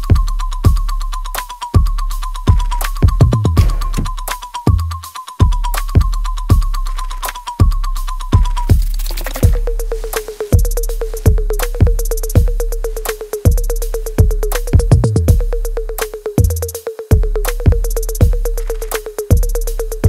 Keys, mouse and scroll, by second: 1.0 alt+click, 3.4 alt+click, 4.7 alt+click, 6.9 alt+click, 8.5 alt+right click, 9.0-10.7 alt+drag, 10.7-12.2 alt+right drag, 12.2-13.9 alt+drag, 13.9-15.6 alt+right drag, 15.6 alt+middle click, 16.3-19.1 alt+right drag, 19.1 click.